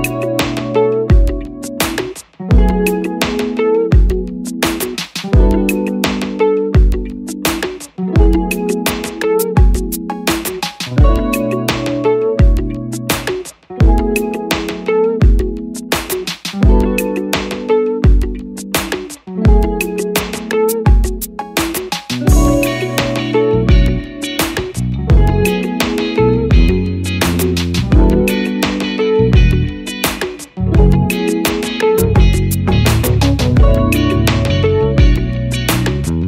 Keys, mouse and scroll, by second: 7.4 click, 13.5 double click, 18.1 Return.